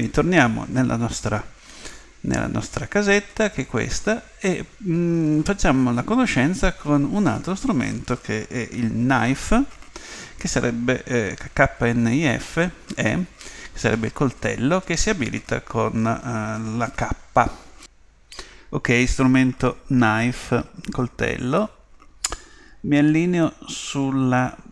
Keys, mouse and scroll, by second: 1.3-1.9 scroll up 1, 1.9-3.7 middle drag, 21.5-23.5 middle drag.